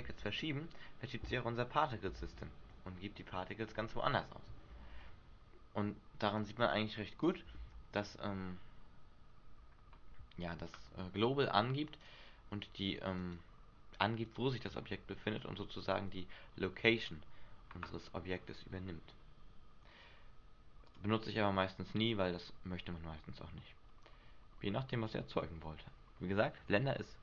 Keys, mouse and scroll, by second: 0.2 g, 2.1 click, 2.3 alt+a, 3.8 Escape, 4.8 r, 7.5 click, 7.7 alt+a, 11.1 Escape, 12.2 right click, 13.3 right click, 21.1 click.